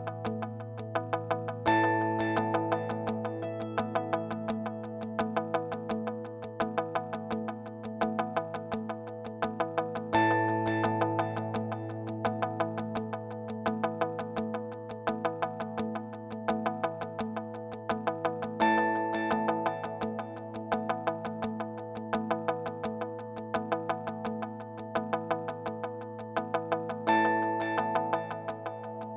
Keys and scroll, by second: 12.9-14.6 typing.